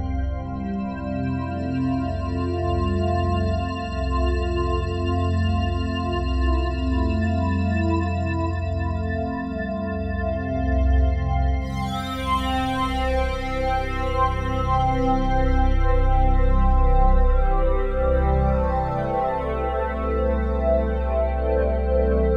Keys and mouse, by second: 0.5 click, 1.4 click, 2.4 click, 3.1 click, 4.1 click, 5.6 click, 6.1 click, 7.2 g, 8.2 Escape, 8.9-10.2 alt+drag, 10.3 click, 10.8 click, 11.7 click, 12.0 click, 12.5-14.7 drag, 14.7 Tab, 15.7 a, 16.6 F3, 18.6-19.7 drag, 19.7 Tab, 20.6-22.3 drag.